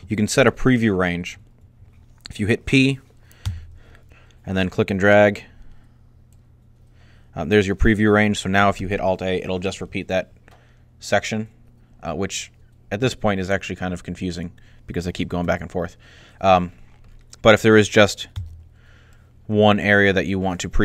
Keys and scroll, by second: 3.2 p, 8.6 alt+a, 15.2 alt+a, 18.2 p.